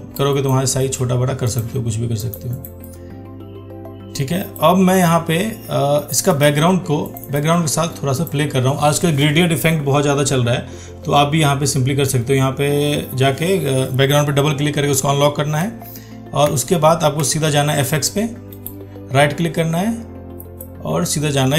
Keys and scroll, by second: 15.9 ctrl+1, 16.8 ctrl+1.